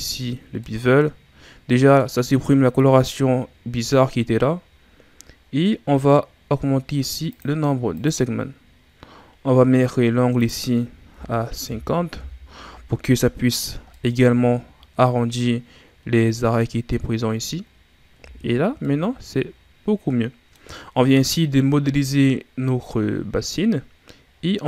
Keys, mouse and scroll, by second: 0.0 click, 0.6-1.3 middle drag, 1.3-4.4 scroll up 2, 5.0-7.3 scroll down 3, 7.3-13.4 drag, 14.0-16.9 middle drag, 17.7-18.2 scroll down 1, 18.2 a, 18.5 scroll down 2, 18.8-24.0 middle drag, 24.3-24.6 scroll down 4.